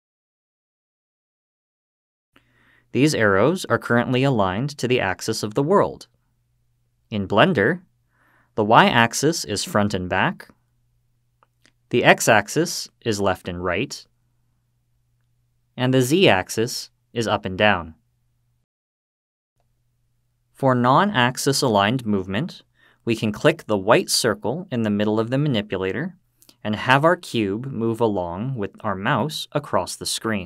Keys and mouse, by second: 0.6-1.2 drag, 8.7-11.6 drag, 12.8-15.5 drag, 16.7-19.9 drag, 29.0-30.1 drag.